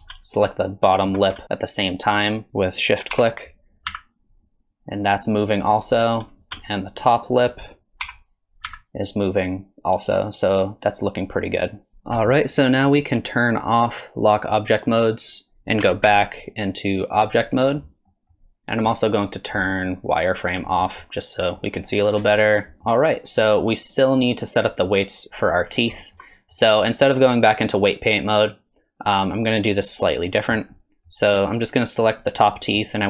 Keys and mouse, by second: 0.3 ctrl+shift+click, 3.2 r, 7.0 ctrl+click, 8.0 r, 13.1-15.0 drag, 16.1 ctrl+Tab, 18.1 click, 19.2 middle click, 19.4-20.6 drag, 20.7 middle drag, 21.6 middle drag, 22.2 click, 22.8 middle click, 24.2 click, 24.7 click, 26.0 shift+middle click, 26.3 middle click, 26.9 middle click, 30.7 middle click, 32.6 middle drag.